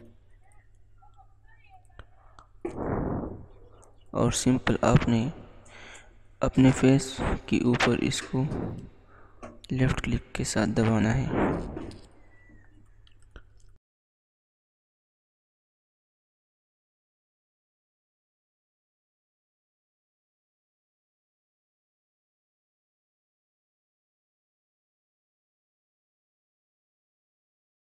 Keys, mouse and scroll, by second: 17.4 click, 17.8 click, 27.6 click.